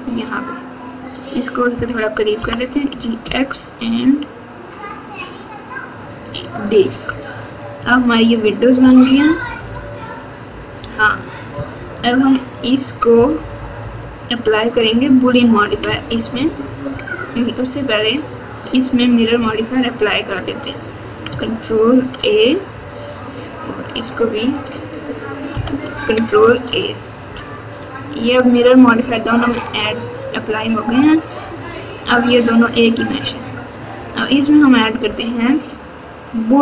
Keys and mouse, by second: 0.9 click, 2.3 g, 7.8 alt+z, 8.8-11.9 typing, 13.1-16.0 typing, 18.7 click, 21.9 ctrl+a, 24.6 click, 26.5 ctrl+a, 31.7 click, 32.9 click, 33.8 click, 35.6-36.6 drag.